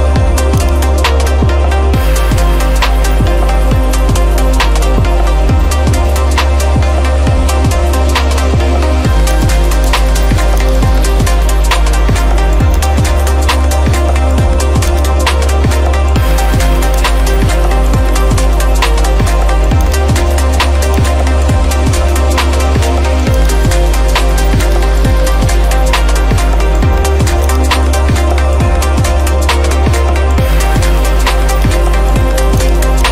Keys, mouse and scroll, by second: 0.7 ctrl+click, 1.3 scroll, 1.6 scroll up 5, 1.7 scroll, 1.8 scroll up 3, 2.0 scroll, 2.5 scroll up 4, 2.5-3.2 scroll, 4.7 scroll, 5.4 scroll, 5.4 scroll down 3, 6.4 middle click, 6.9-7.4 scroll down 5, 9.2 scroll, 9.5 ctrl+click, 10.0 ctrl+click, 10.6 ctrl+click, 10.7 ctrl+click, 11.8 scroll, 12.7 scroll, 12.9 ctrl+click, 13.4-14.0 scroll up 3, 14.3 scroll, 15.0 right click, 17.1 click, 19.8 click, 21.1 ctrl+click, 23.1 ctrl+click, 23.4 ctrl+click, 25.9 middle click, 27.3 middle click, 27.6 ctrl+click, 28.6 middle click, 28.6 middle click, 28.8-29.3 scroll up 8, 30.1 middle click, 30.4-31.3 scroll down 13, 31.5 scroll, 31.6 click, 32.7 ctrl+click.